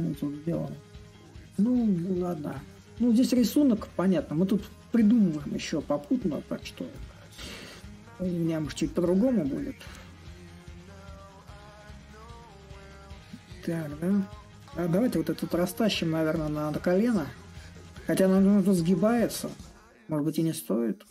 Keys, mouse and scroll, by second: 0.0-5.0 middle drag, 6.7-11.7 drag, 13.2-14.8 drag, 14.8 a, 16.1-21.1 drag.